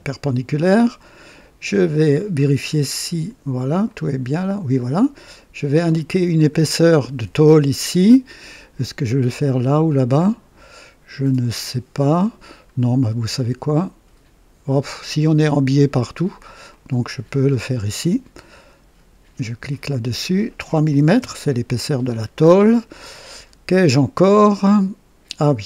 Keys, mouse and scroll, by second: 2.3-2.6 scroll up 2, 3.8-5.0 drag, 5.9 click, 6.5 scroll down 2, 8.7 scroll down 2, 11.5 right click, 12.5-13.1 scroll down 2, 13.3-14.3 right drag, 14.9-15.6 right drag, 15.7 right click, 16.6 right click, 17.4 scroll up 2, 19.7 click, 20.9 KP_3, 21.1 KP_Enter, 22.4 scroll up 1, 22.8 scroll down 1, 23.3 right click, 24.3-25.0 right drag.